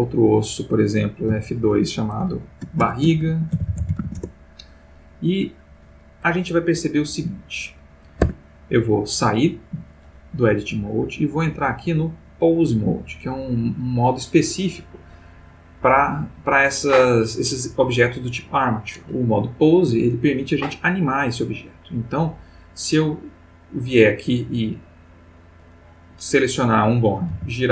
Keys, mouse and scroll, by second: 0.4 click, 1.3 F2, 2.3-4.0 typing, 4.1 shift+Return, 8.2 Tab, 11.2 click, 14.2 click, 21.8-23.5 drag, 25.5 click, 27.3 r.